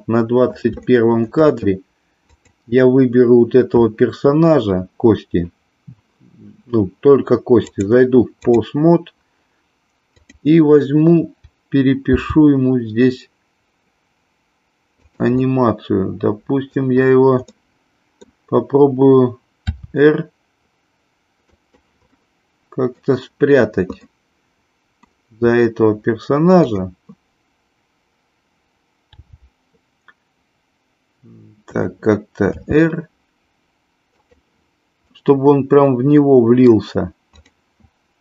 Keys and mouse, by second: 0.0 middle click, 0.9 shift+middle click, 2.3 click, 7.5-8.6 drag, 10.0 click, 12.0 g, 15.0 drag, 15.4-16.7 middle drag, 17.5 middle click, 19.6 r, 21.5 click, 22.1-23.0 middle drag, 24.0-25.0 middle drag, 26.5 click, 29.0 g, 31.8 click, 32.4 r, 35.0-36.6 middle drag, 37.4 click.